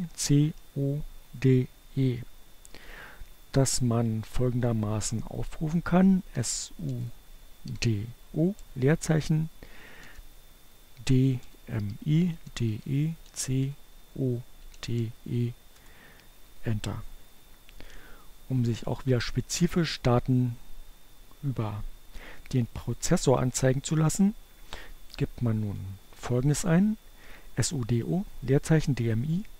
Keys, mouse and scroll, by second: 4.4-6.8 typing, 8.6 d, 10.1-13.7 typing, 14.4 Return, 24.5 Up.